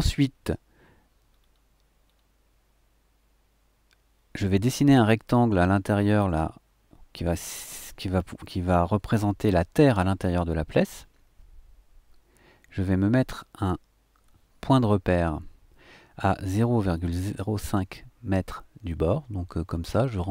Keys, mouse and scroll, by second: 1.3-11.3 scroll down 3, 16.9 click, 18.5-19.0 scroll up 2, 19.6-20.0 scroll up 2.